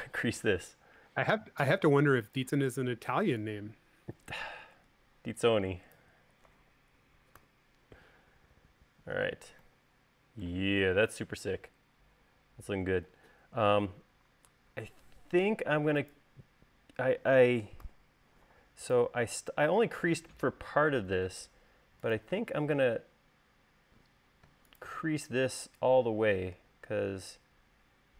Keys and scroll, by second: 8.1 u, 9.9 space, 18.5 u.